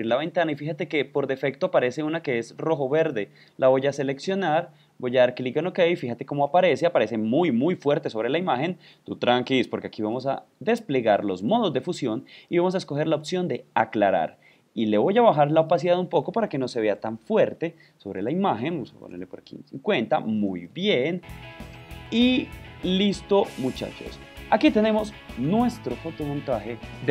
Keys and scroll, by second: 23.8 super+v, 23.9 super+0.